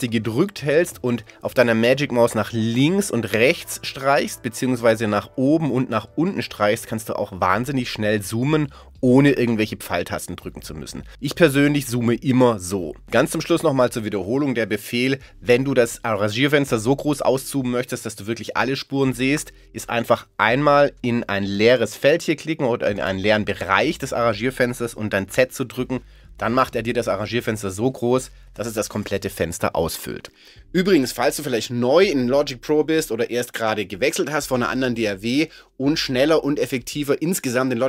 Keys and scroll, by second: 25.3 z.